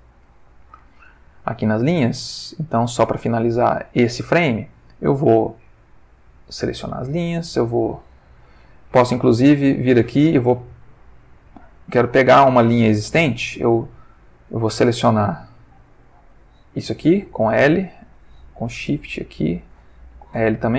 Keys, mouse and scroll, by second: 1.2 click, 2.9 click, 5.6 click, 6.3 click, 7.9 click, 9.7-10.8 drag, 11.4 click, 13.3 Tab, 15.1 click, 17.0 l, 18.8 shift+click, 20.3 l.